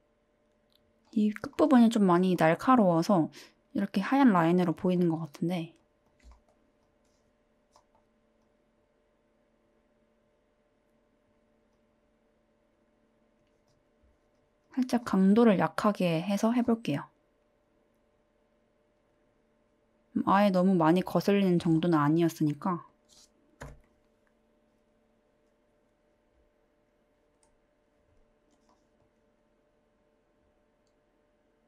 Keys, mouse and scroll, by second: 2.3 middle click, 6.1 drag, 6.8 click, 8.5-11.3 drag, 11.7-13.4 drag, 13.6 click, 14.3 drag, 14.6 click.